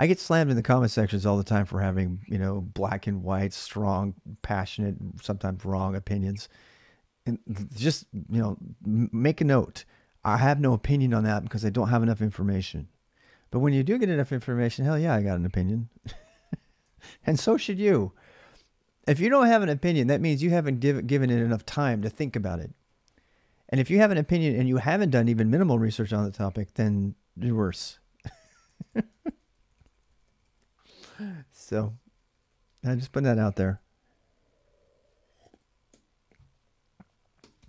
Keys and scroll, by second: 16.6-17.7 typing, 28.4-30.5 typing, 32.0-36.0 typing, 37.4-37.6 typing.